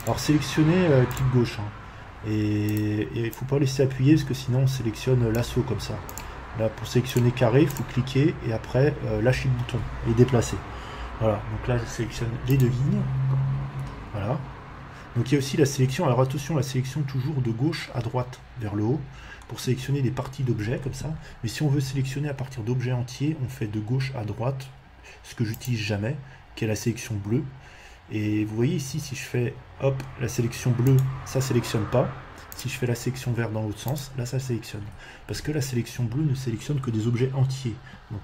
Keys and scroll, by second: 21.7 Escape, 35.4 Escape.